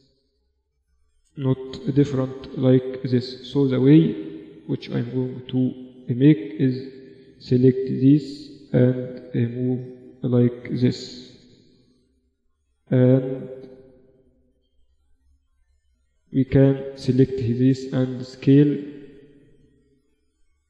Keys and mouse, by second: 0.2 a, 1.3 b, 2.6 z, 3.7 a, 3.9 b, 5.7 g, 10.1 a, 10.6 b, 11.9 g, 13.4 z, 13.5 z, 14.4 a, 16.1-17.6 drag, 16.9 s.